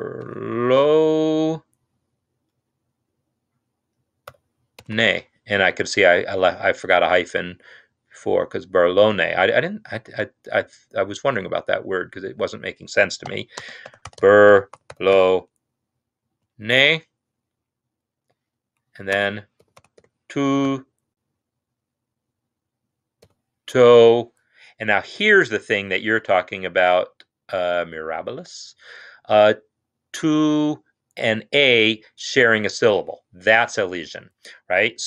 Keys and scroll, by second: 0.0-0.7 typing, 4.3-4.7 typing, 13.2-15.2 typing, 16.2 typing, 18.1-20.5 typing, 23.2-23.7 typing.